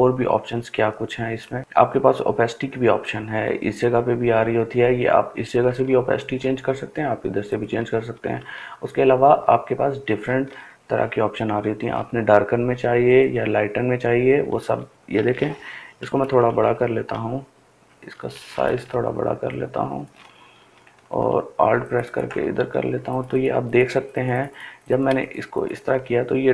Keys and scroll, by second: 14.3-16.2 typing.